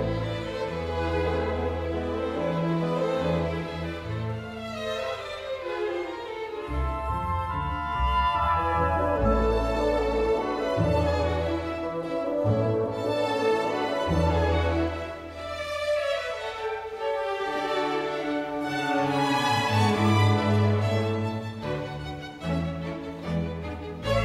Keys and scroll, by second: 7.9 1, 16.6-17.0 typing.